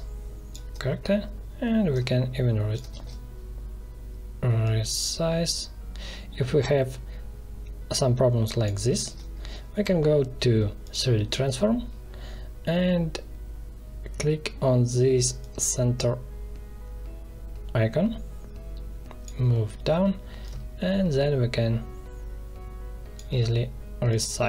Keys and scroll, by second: 2.9 ctrl+z, 8.9 ctrl+z.